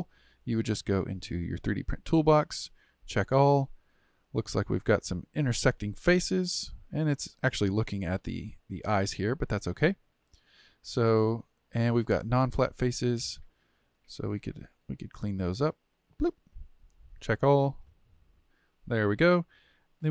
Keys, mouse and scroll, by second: 0.4-1.4 scroll down 1, 1.4 click, 2.8-4.3 drag, 4.3 Tab, 5.4-8.4 middle drag, 9.9 Tab, 13.5-15.3 middle drag, 15.3 click, 16.0 click, 17.2 click, 17.9 click.